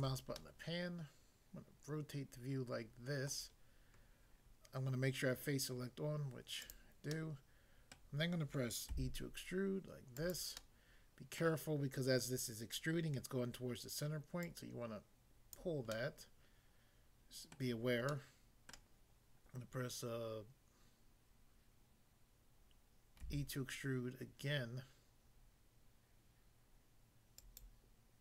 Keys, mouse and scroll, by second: 3.3 middle click, 6.7 click, 7.1 middle click, 8.0 middle click, 8.9 e, 10.1 click, 10.6 middle click, 11.4 middle click, 14.4 click, 15.5 click, 16.0 middle click, 17.6 middle click, 18.1 middle click, 18.7 middle click, 23.2 e, 27.4 click, 27.7 click.